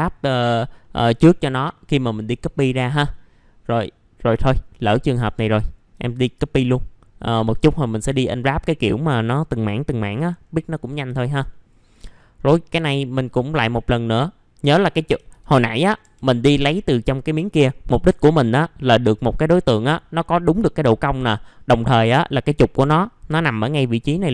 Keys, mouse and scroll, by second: 0.8 middle click, 1.0 scroll down 1, 1.7-4.3 middle drag, 4.4 alt+middle click, 4.8-5.1 scroll up 1, 5.1 middle click, 5.6 alt+middle click, 8.4-10.1 scroll up 1, 10.1-10.8 scroll down 1, 10.8 middle click, 11.1 alt+middle click, 15.7-16.0 scroll down 1, 16.0 F3, 16.3 middle click, 16.4-17.3 scroll down 1, 21.3 middle click, 21.9-22.6 scroll up 1, 23.5-24.3 scroll down 1.